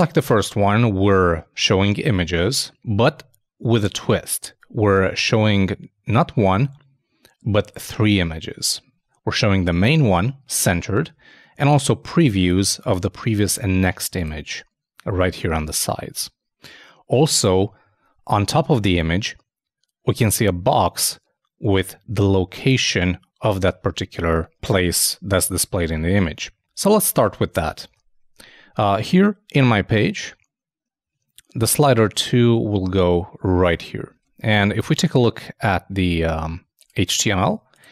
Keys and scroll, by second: 27.9 super+i, 34.1 super+Tab.